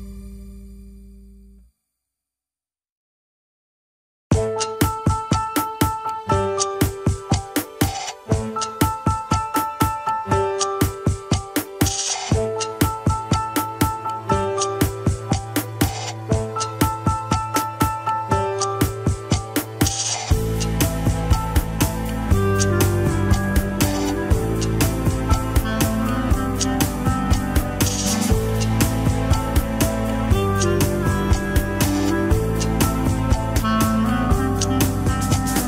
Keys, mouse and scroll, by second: 0.1 Tab, 0.5 shift+z, 0.7 scroll down 2, 1.6 alt+h, 2.6 ctrl+z, 2.9 ctrl+Tab, 3.1 alt+z, 3.9 alt+h, 4.9 click, 5.2-5.6 scroll up 1, 5.6 Tab, 6.3 alt+z, 6.7 click, 7.7 shift+click, 8.6 ctrl+l, 9.1 alt+z, 9.3-9.8 scroll down 2, 9.8 p, 10.5 Tab, 10.7 click, 11.2 Tab, 11.4 alt+z, 11.7 click, 12.0 alt+z, 12.4-13.2 scroll up 2, 13.2 click, 14.0-14.3 scroll up 1, 14.3 r, 19.6 middle click, 19.9 scroll down 2, 20.2 r, 22.6 KP_1, 23.1 Tab, 23.4 alt+z, 24.0 middle click, 24.9 click, 25.4 click, 25.9 Tab, 26.1 click, 26.5 click, 27.0 alt+z, 27.2 middle click, 27.5 alt+z, 27.9 click, 28.3 KP_1, 28.6 alt+z, 28.9 alt+z, 29.3 g, 30.2-31.4 middle drag, 31.4 shift+s, 31.8 middle click, 32.2 KP_1, 32.4 alt+z, 32.8 Tab, 33.0 click, 33.3 Tab, 33.8 r.